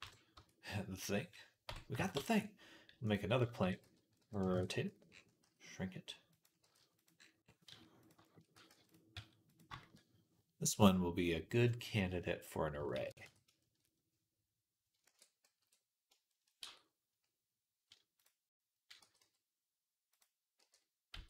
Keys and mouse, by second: 0.2 Tab, 0.5-3.4 drag, 1.5 Tab, 2.0 shift+a, 3.4 r, 4.9-10.6 right drag, 5.3 s, 6.4 g, 7.5 s, 8.4 g, 9.0 s, 10.6-13.6 drag, 12.8 ctrl+a, 13.6-14.7 right drag, 14.9 ctrl+a, 16.4 Tab, 18.8 g, 20.4 e.